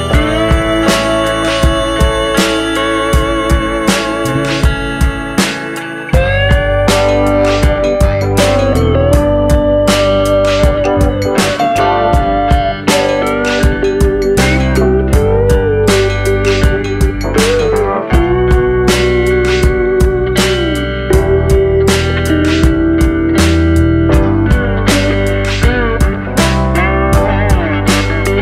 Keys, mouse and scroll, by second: 1.6-2.1 scroll down 2, 1.7 middle click, 2.1 scroll up 1, 2.3 scroll down 3, 2.4 middle click, 3.0 middle click, 3.9 s, 4.6 r, 5.6 r, 6.4 scroll down 2, 6.5 middle click, 7.4-7.8 scroll down 3, 7.8 middle click, 8.4-9.0 scroll up 6, 9.0 r, 10.8 s, 11.6 g, 13.5 r, 14.4 scroll down 4, 14.6 middle click, 15.5-15.8 scroll down 3, 15.8 middle click, 16.0 click, 16.2-16.6 scroll up 3, 16.6 scroll down 1, 16.7 scroll down 1, 16.8 middle click, 17.3 click, 18.4 KP_1, 19.1 shift+d, 20.2 r, 22.1 g, 24.1 middle click, 25.2-25.6 scroll up 3, 25.4 click, 25.9 click, 26.6 r, 28.1 scroll down 2, 28.3 middle click.